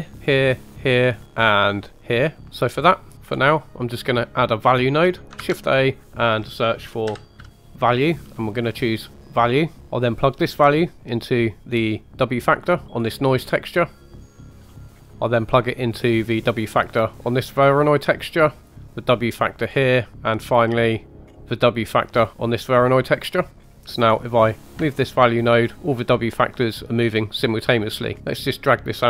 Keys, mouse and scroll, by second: 0.4 middle click, 0.7 click, 1.1 middle click, 1.9 click, 2.6-3.9 middle drag, 3.2-3.9 scroll up 2, 5.3 shift+a, 9.8 click, 9.8 middle click, 9.8 scroll up 1, 10.5 drag, 13.0-13.7 scroll down 4, 13.7 middle click, 14.3 click, 14.6-15.1 scroll up 3, 14.8 middle click, 15.5 drag, 17.1 middle click, 18.4 click, 18.9 middle click, 19.7 scroll down 2, 20.3 click, 21.0 middle click, 21.2-21.6 scroll up 2, 21.6 drag, 22.5 click, 23.6 scroll down 1, 24.7-27.4 shift+drag, 28.1 scroll down 4, 28.2 scroll up 2, 28.3 click.